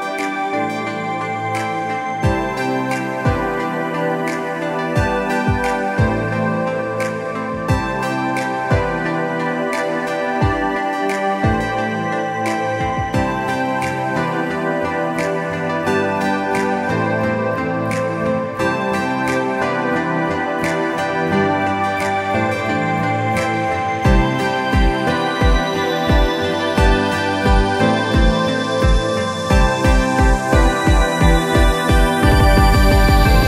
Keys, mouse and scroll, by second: 11.1-11.6 scroll up 2, 13.0 click, 15.0 click, 20.5 click, 21.7 Delete, 22.7 click, 27.4 click, 27.7 scroll down 2, 28.4 click, 29.8 click, 31.5-31.9 alt+scroll down 2, 32.4 click.